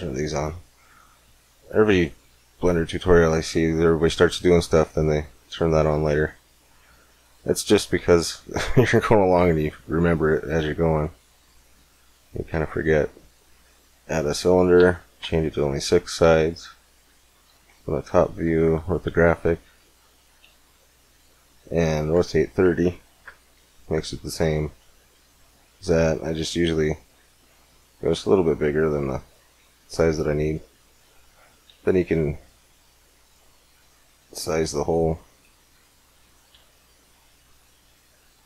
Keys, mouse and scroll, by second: 0.5-1.7 middle drag, 4.1-6.3 middle drag, 6.4-7.6 middle drag, 7.6 shift+a, 11.2-13.0 drag, 16.0 KP_7, 17.4 KP_5, 17.9 z, 19.9-22.1 middle drag, 22.1 r, 24.6 s, 29.9 middle click, 30.2 KP_1, 30.5 middle click, 31.6 g, 32.9 click, 33.6 s, 34.1 click, 36.3 g.